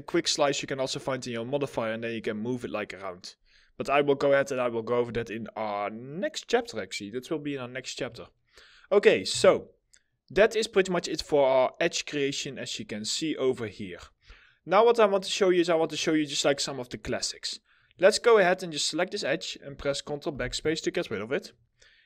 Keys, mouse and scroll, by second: 9.0 2, 9.5 middle click, 14.0 alt+middle click, 17.4 double click, 21.6 middle click.